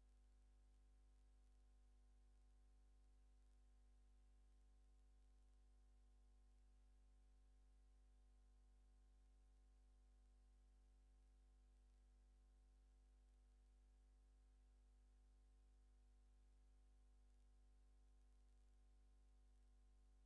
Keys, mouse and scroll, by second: 0.7 scroll up 2, 1.3 scroll up 2, 1.8 scroll up 2, 2.4-7.2 scroll up 22, 9.0 click, 9.9 click, 11.2 click, 12.6-13.6 drag, 15.8 scroll down 1, 16.7 scroll down 2, 17.8 scroll down 2, 18.6 scroll down 2, 19.5 scroll down 2.